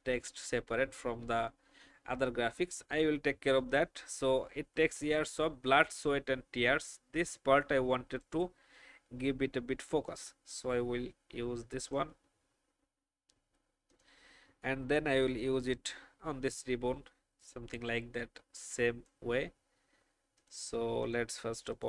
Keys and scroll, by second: 0.8 v.